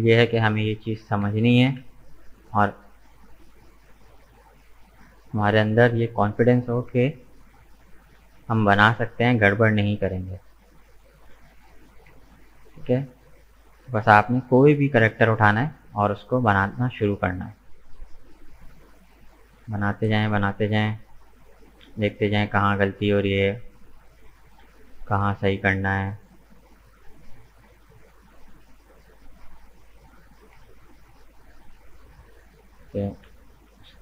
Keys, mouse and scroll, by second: 1.0 g, 3.5-6.5 middle drag, 7.7-8.8 middle drag, 8.8 right click, 9.2-11.7 middle drag, 11.7 g, 14.4 middle click, 15.1-15.6 scroll down 2, 15.6 Tab, 15.8 right click, 16.1-18.2 middle drag, 18.2-18.6 scroll down 2, 18.6-20.1 middle drag, 20.1-20.5 scroll up 2, 20.5-21.8 middle drag, 21.8-22.1 scroll down 2, 22.1-23.7 middle drag, 23.7 right click, 24.2 Tab, 24.7 middle click, 25.4-26.0 scroll up 2, 26.0 scroll up 1, 26.1-29.1 middle drag, 30.2 alt+right click, 30.6-32.7 middle drag, 32.7 g.